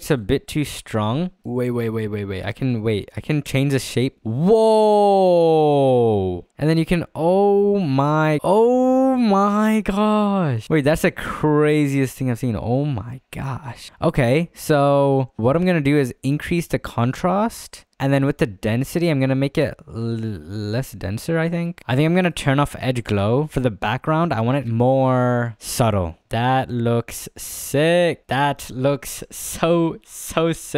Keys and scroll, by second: 8.4 ctrl+z, 9.5 ctrl+z, 11.2 ctrl+z, 13.8 ctrl+z.